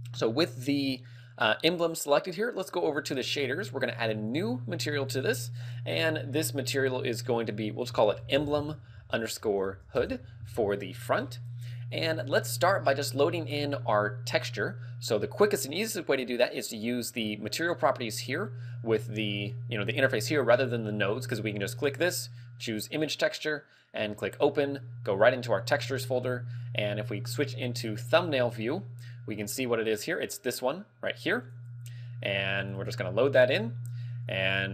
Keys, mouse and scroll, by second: 1.1 right click, 4.7 click, 23.4 click, 33.1 click.